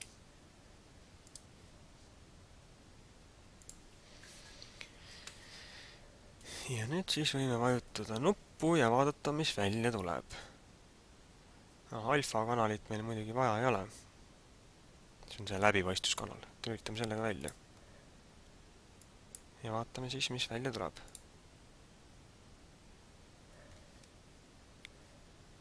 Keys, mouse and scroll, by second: 3.7 click, 6.5 click, 17.3 click, 19.0 click, 21.0 click.